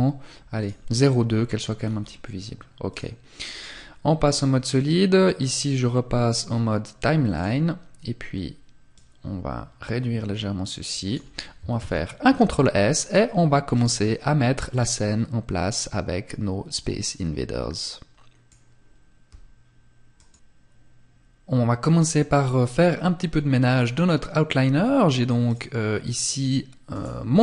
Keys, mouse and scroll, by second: 24.6 click, 26.1 right click.